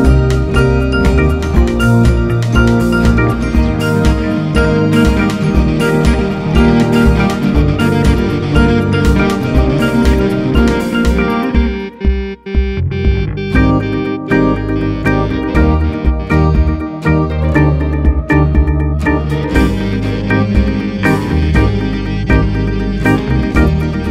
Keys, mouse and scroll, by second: 0.0 click, 0.2 middle click, 0.8 Tab, 3.0-5.2 drag, 5.2 ctrl+a, 5.5-5.9 drag, 6.1-7.2 middle drag, 7.2 click, 7.6-10.8 middle drag, 11.9 click, 12.9 shift+a, 15.4 r, 17.8 KP_3, 19.4 g, 20.5 s, 22.1 s.